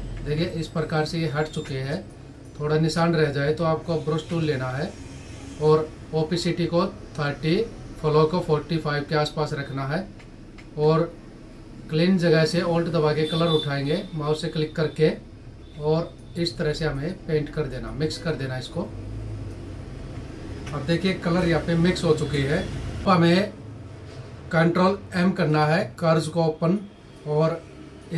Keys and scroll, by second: 0.6 ctrl+=, 1.4 space, 19.4 ctrl+-, 25.0 ctrl+m.